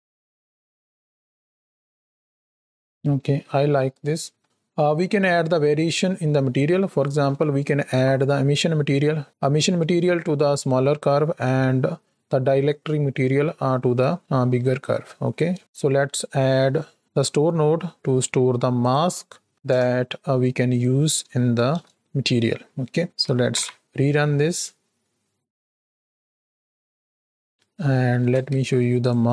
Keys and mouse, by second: 3.5 space, 7.2 shift+Left, 15.2 middle click, 15.6 shift+a, 18.8 click, 20.6-21.7 drag, 22.7 middle click, 23.4 shift+Right, 23.5 shift+Left, 23.8 space, 27.4 middle click, 28.2 space, 28.4 shift+a.